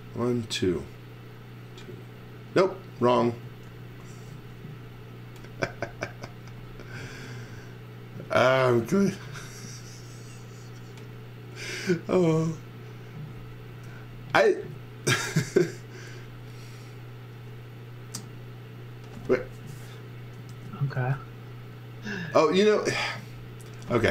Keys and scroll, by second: 3.6 super+z, 4.4 space, 8.8 super+z, 9.2 space, 13.7 space, 20.5 super+z, 20.9 space.